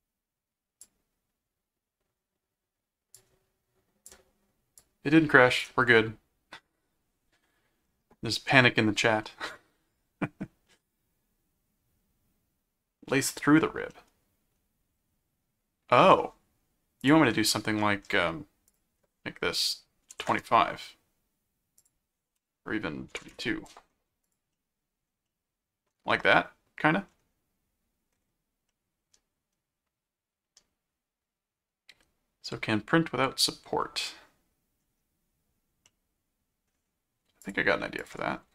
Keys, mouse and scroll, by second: 3.1 click, 4.8 click, 8.6 middle click, 9.2-10.4 middle drag, 10.5 scroll up 2, 13.9-16.1 middle drag, 16.1 scroll up 2, 16.9 scroll up 2, 17.0 click, 17.5 middle click, 18.7 click, 21.8 click, 24.2 click, 24.5 middle click, 25.3 middle click, 26.3 middle click, 28.7-34.8 middle drag, 35.9 middle click, 37.4 click, 38.0 ctrl+click.